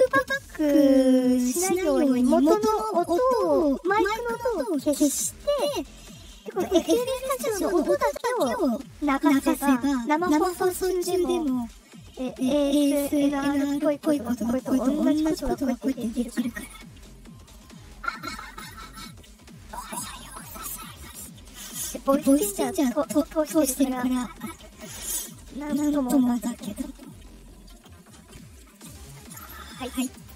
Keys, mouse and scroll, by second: 11.3-24.8 drag, 29.9 click.